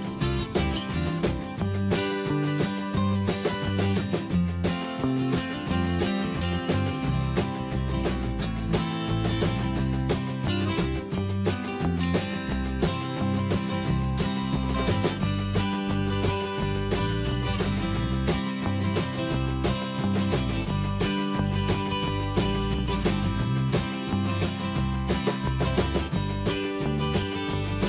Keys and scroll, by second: 1.9 Delete, 3.4 BackSpace, 5.0 Escape, 6.0 alt+Tab, 8.5 Escape, 9.5 ctrl+z, 14.4 ctrl+v, 17.1 Escape, 19.4 ctrl+z, 21.5 ctrl+c, 22.3 ctrl+v, 25.8 Escape.